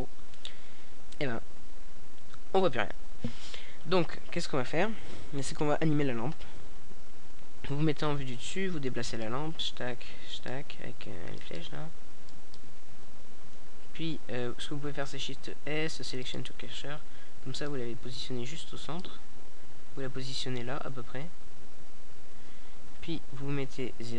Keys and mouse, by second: 0.0 Escape, 1.7 KP_0, 5.2-8.3 drag, 8.3-10.6 middle drag, 10.6 click, 10.9 shift+s, 13.6-18.7 drag, 18.7 KP_0, 20.0-21.9 middle drag.